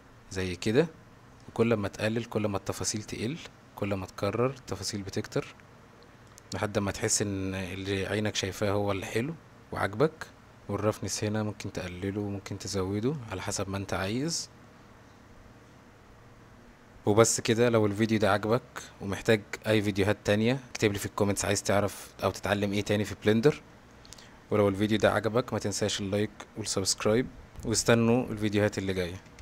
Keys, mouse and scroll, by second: 1.6-6.3 drag, 8.0-10.6 drag, 10.6-13.3 drag, 18.3-22.8 middle drag, 23.9 shift+middle drag, 24.5-25.2 middle drag, 25.8-27.7 middle drag.